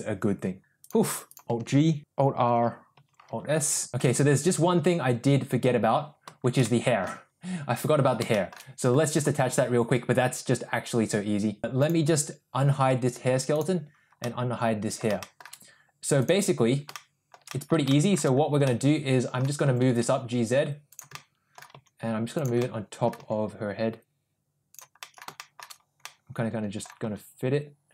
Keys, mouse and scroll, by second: 0.9 click, 1.4 alt+g, 1.4 a, 3.0 alt+r, 3.6 alt+s, 3.9 shift+middle click, 6.6-7.0 middle drag, 8.3 shift+middle drag, 11.8 click, 13.6 click, 14.2-15.0 middle drag, 15.2 shift+middle drag, 16.2 click, 16.9-17.3 shift+middle drag, 17.5 middle click, 17.9 shift+middle drag, 18.7-19.4 middle drag, 19.7 g, 21.3 middle click, 21.8 g, 22.7 middle click, 23.2 g, 25.1 middle click, 25.4 shift+middle click, 26.1-26.9 middle drag, 27.1 g.